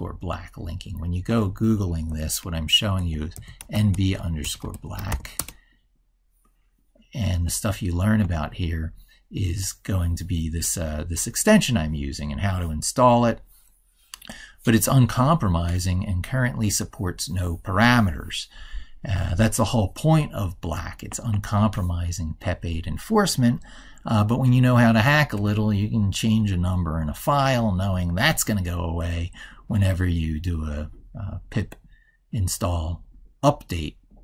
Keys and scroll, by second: 1.9 ctrl+t, 23.9 ctrl+super+Right, 28.2 ctrl+super+Left.